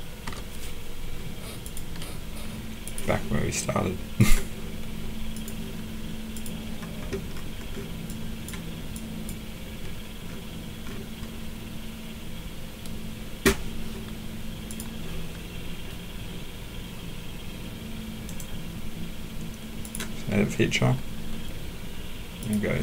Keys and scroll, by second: 0.2 BackSpace.